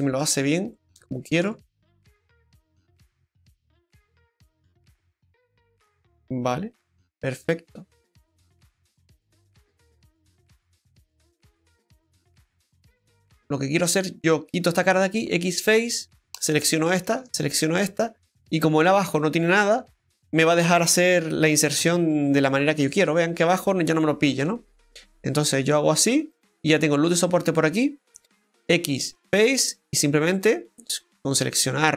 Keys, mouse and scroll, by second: 0.0 scroll down 1, 0.2 middle click, 0.7 right click, 1.4 Tab, 1.8 scroll down 2, 2.1 middle click, 12.7-13.1 scroll up 4.